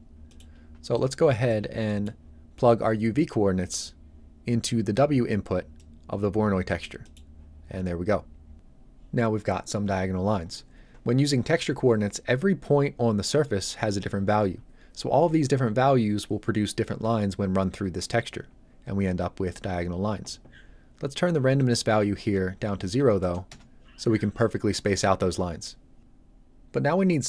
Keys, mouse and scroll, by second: 0.2 middle click, 0.5-0.9 scroll down 1, 0.9 click, 1.6 scroll down 1, 1.8 middle click, 3.7 click, 6.1-6.4 scroll up 1, 7.0 middle click, 7.1-8.5 scroll up 1, 21.5 click, 23.1 KP_0, 23.4 Return.